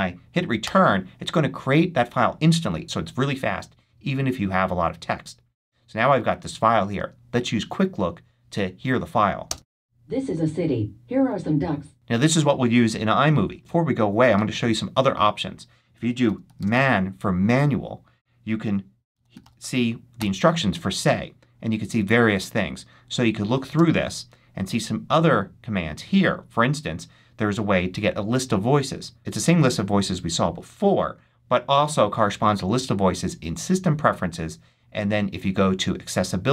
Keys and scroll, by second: 0.5 Return, 9.3 space, 11.9 space, 15.9-17.0 typing, 18.8-19.8 typing, 20.0 Return, 23.6 space.